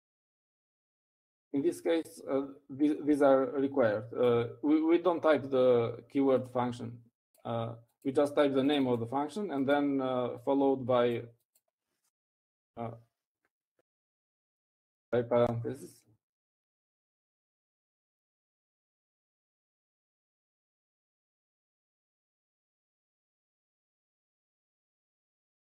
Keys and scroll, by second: 0.9-3.1 typing, 16.2-18.2 typing, 20.2 Up, 20.7-25.6 typing.